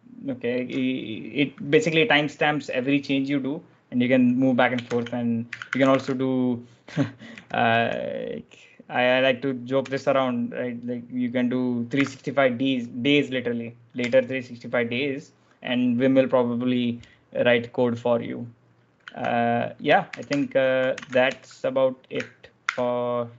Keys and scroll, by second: 4.7-8.1 typing, 9.6 5, 11.8 d, 13.9 Return, 18.8 typing, 19.9 ctrl+j, 20.1 ctrl+h, 20.8 ctrl+j, 20.9-21.6 typing, 22.5 ctrl+f.